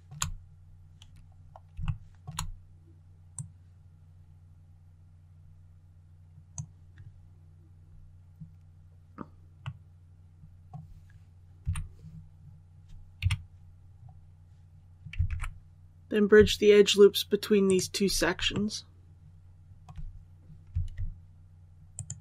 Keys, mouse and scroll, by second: 0.3-1.2 scroll down 2, 1.7 shift+middle click, 3.2-6.6 drag, 9.5-11.5 middle drag, 11.5 2, 13.1 KP_1, 13.7 scroll up 1, 14.1-15.0 scroll down 1, 15.2 alt+a, 17.5 alt+right click, 18.4-19.7 shift+middle drag, 19.2-19.7 scroll up 1, 21.8 alt+shift+right click.